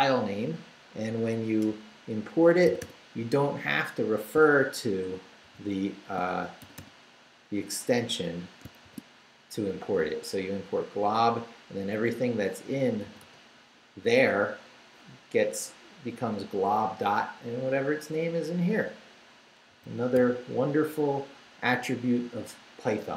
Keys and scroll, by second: 1.7 Return, 2.7 g, 5.4 shift+g, 6.6 shift+g, 8.8 shift+v, 12.9-13.7 typing, 19.7 g, 20.2 t.